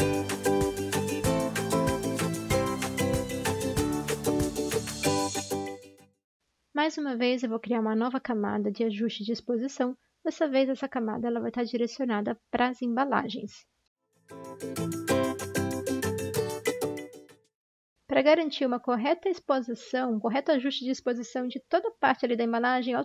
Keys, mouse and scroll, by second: 0.0 ctrl+d, 0.0 ctrl+z, 0.8-3.9 typing, 11.1 Return.